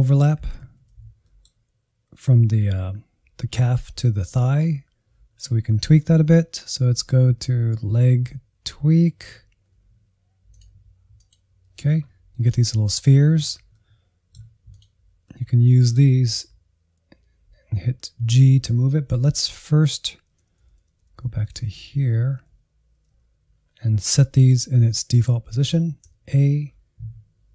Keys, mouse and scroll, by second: 0.0 Insert, 0.3 Insert, 0.6 shift+z, 1.2-9.7 middle drag, 9.7-10.4 scroll down 2, 10.5-13.0 drag, 13.0-14.7 middle drag, 14.7 click, 15.2-20.4 middle drag, 20.4-21.5 Left, 21.7 Left, 21.8 Left, 22.0 Left, 22.4 Left, 23.1 Right, 23.5-24.2 scroll down 5, 24.2-26.1 middle drag, 26.1 a.